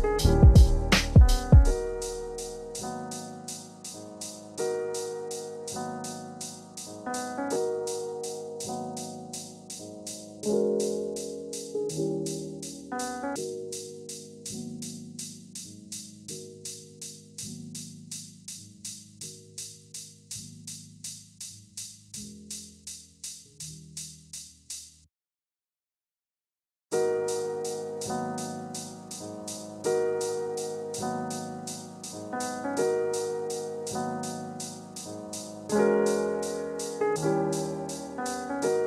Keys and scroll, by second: 22.5 ctrl+a, 26.9 ctrl+z.